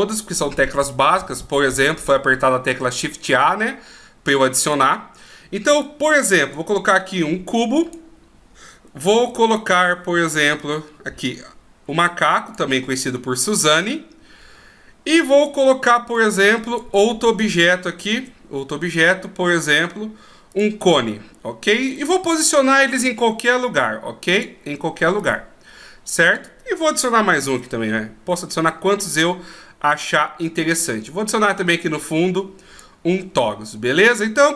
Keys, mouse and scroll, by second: 3.2 click, 5.8 click, 9.1 shift+a, 13.8 click, 16.1 click, 18.1 shift+a, 21.9 click, 25.2 click, 27.4 shift+a, 30.0 click, 31.7 click.